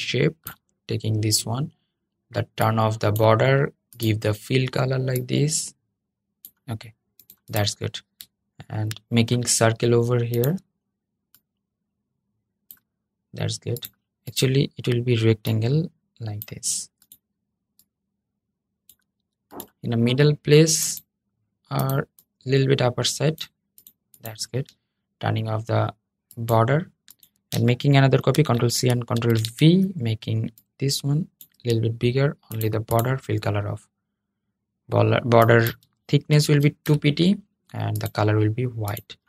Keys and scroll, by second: 28.0 super+c, 28.9 super+v.